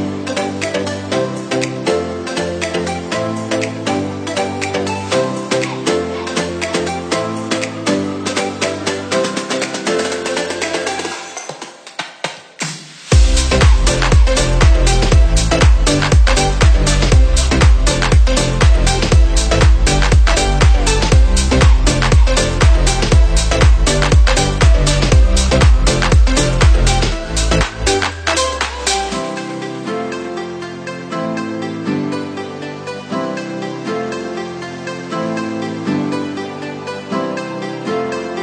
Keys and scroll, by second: 8.3 v, 8.7 o, 9.6 l, 11.8 c, 12.0 a, 13.3 n, 13.4 o, 16.2-18.0 typing, 16.4 Right, 16.8 Right, 17.1 Right, 17.5 Right, 17.9 Right, 26.0 space, 36.7 space.